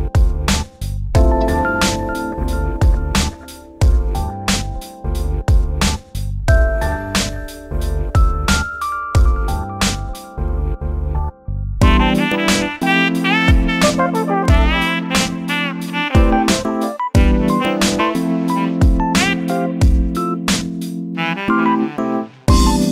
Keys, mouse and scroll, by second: 3.3 s, 4.7 scroll up 2, 4.9 shift+middle click, 5.2-5.9 scroll up 1, 5.9 s, 8.0 g, 9.6 shift+middle click, 10.5 shift+d, 12.9 shift+d, 16.8 scroll down 2, 17.0-18.2 shift+middle drag, 18.2 shift+d, 22.2 scroll up 1, 22.7 shift+middle click.